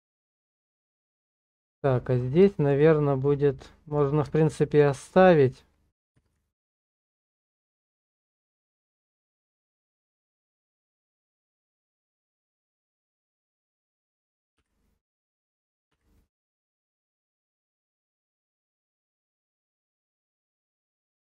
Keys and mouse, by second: 0.9 middle click, 2.5 shift+middle click, 2.9-4.0 middle drag, 4.5 shift+middle click, 5.1 middle click, 6.2 shift+z, 6.8 shift+middle click, 8.4-13.0 middle drag, 13.4 shift+middle click, 14.6 w, 15.9 w, 16.7 BackSpace, 16.7 w, 18.1 w, 21.1-21.2 drag.